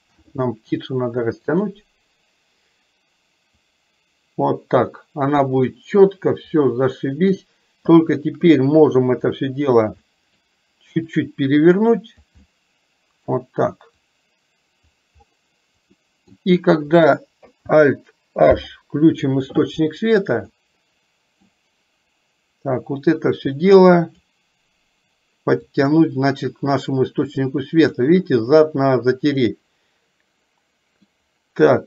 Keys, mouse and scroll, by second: 3.8-5.4 drag, 6.7 middle click, 8.3 shift+click, 10.1-10.6 middle drag, 11.3-12.3 drag, 12.4-13.3 middle drag, 14.2 click, 16.1 middle click, 18.6 alt+h, 20.6-21.6 middle drag, 23.7 click, 25.8-28.1 drag, 29.6-31.1 middle drag, 31.1 scroll down 1.